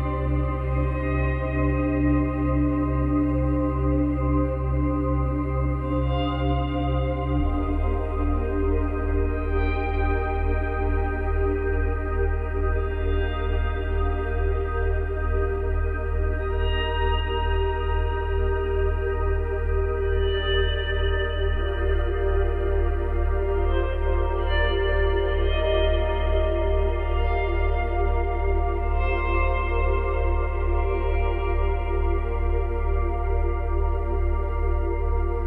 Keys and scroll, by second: 7.8 ctrl+c, 7.9 ctrl+v, 19.1 space, 24.2 space, 28.3 space, 29.6 space, 32.2 space, 33.4 space.